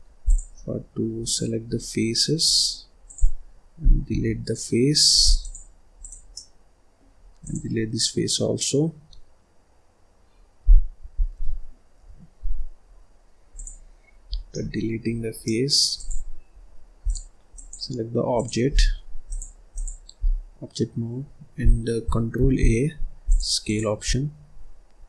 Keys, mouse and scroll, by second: 0.1 click, 0.6-1.1 scroll down 1, 1.1 click, 2.3 click, 2.9 click, 5.9 click, 6.2 middle click, 7.1 scroll up 1, 7.3 click, 11.9 Delete, 14.2 scroll down 1, 14.4 middle click, 14.9-15.3 scroll up 1, 15.3 middle click, 15.8 click, 16.4-16.9 scroll down 2, 16.9 click, 17.4 click, 18.2 click, 19.1-22.2 drag, 22.4 ctrl+a, 23.6 click, 24.0 scroll down 1.